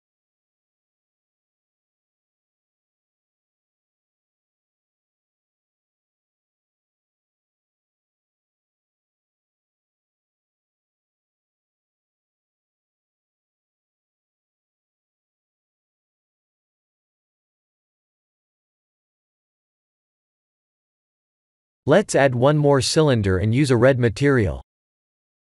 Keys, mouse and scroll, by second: 0.1 ctrl+KP_Add, 0.5 ctrl+KP_Add, 1.0 ctrl+KP_Add, 1.4 ctrl+KP_Add, 1.8 ctrl+KP_Add, 2.2 ctrl+KP_Add, 2.6 ctrl+KP_Add, 3.7 middle click, 4.7-5.2 scroll down 3, 5.2 middle click, 6.2 ctrl+KP_Add, 6.6 ctrl+KP_Add, 7.0 ctrl+KP_Add, 7.6 middle click, 7.7 middle click, 8.6-9.5 scroll up 4, 9.5 scroll down 1, 9.6 scroll down 2, 10.0 middle click, 11.2 ctrl+KP_Add, 11.5 ctrl+KP_Add, 11.9 ctrl+KP_Add, 12.3 ctrl+KP_Add, 12.7 ctrl+KP_Add, 13.2 ctrl+KP_Add, 13.7 ctrl+KP_Add, 14.0 ctrl+KP_Subtract, 14.4 ctrl+KP_Subtract, 15.9 click, 16.8 click, 17.8 click, 19.9 middle click, 20.5-20.9 scroll down 3, 20.8 click, 21.1 middle click, 21.8 click, 22.2 shift+a, 23.5 Tab, 24.0 shift+a.